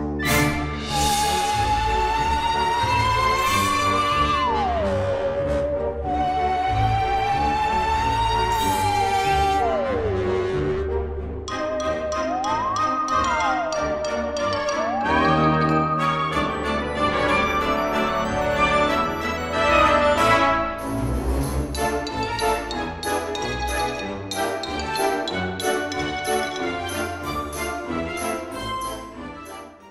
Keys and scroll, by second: 4.0 BackSpace, 23.9 Escape.